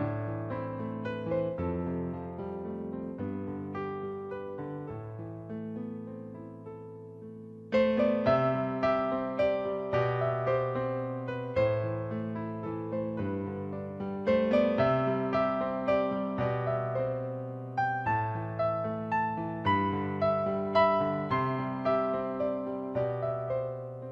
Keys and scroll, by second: 1.2 space, 3.4 space, 4.8 ctrl+=, 5.1-5.8 typing, 7.3 space, 8.4-10.1 typing, 13.8-16.1 typing, 17.4-18.8 typing, 19.9 space, 20.8 space, 22.3 space.